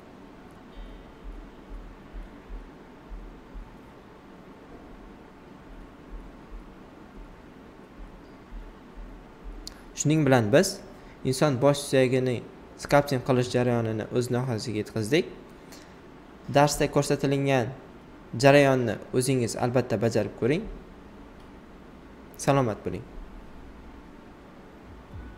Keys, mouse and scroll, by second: 4.6 click, 22.6 right click, 23.1 typing, 24.3-25.3 right drag.